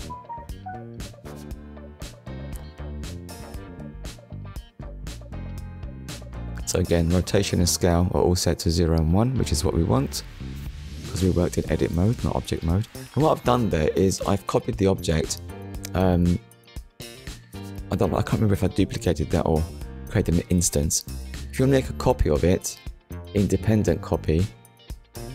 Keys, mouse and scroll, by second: 2.5 Return, 3.7 shift+middle click, 11.3 shift+d, 12.5 right click, 13.6 click, 16.5 shift+d, 18.0 click, 20.6 scroll down 1, 22.0 click, 23.0 click, 23.6 click, 24.3 click.